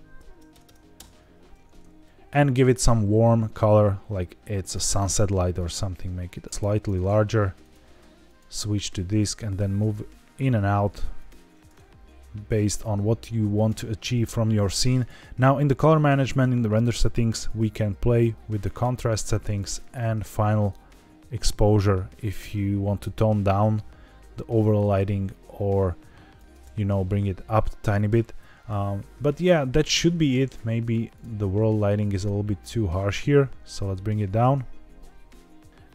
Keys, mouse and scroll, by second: 0.6 KP_0, 2.0 ctrl+z, 2.6 click, 5.6 click, 6.5 ctrl+z, 7.5 click, 8.7 g, 8.8 z, 9.0 z, 11.1 click, 12.0 scroll up 2, 13.5 click, 14.0 scroll down 2, 14.9 click, 15.3 scroll down 2, 17.4-18.7 drag, 19.7 shift+click, 20.6-26.4 shift+drag, 26.7 scroll down 3, 28.2-29.3 scroll up 1, 30.4 click, 31.0 click, 32.1 click, 35.7 scroll up 3.